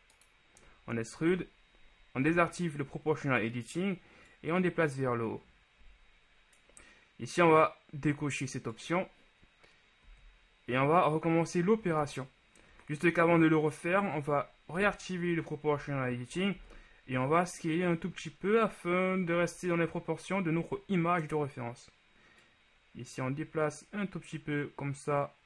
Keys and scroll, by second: 2.9 0, 10.3 z, 15.0 0, 15.9 z, 16.7 s.